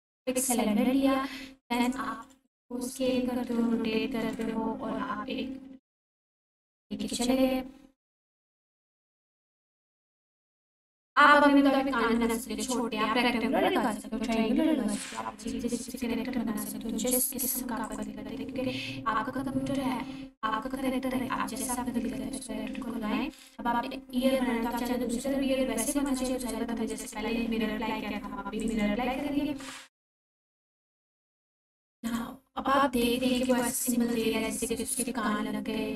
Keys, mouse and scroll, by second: 0.2 click, 0.6 s, 1.8 click, 2.1 r, 2.5 x, 3.5 9, 4.3 Return, 6.0 1, 6.7 g, 7.1 x, 8.6 click, 9.2-10.0 scroll up 1, 10.0 s, 10.9 click, 11.2 g, 11.5 x, 12.2 click, 17.9 click, 26.1 click, 31.0-31.8 scroll up 1, 32.0 click, 33.4 shift+click.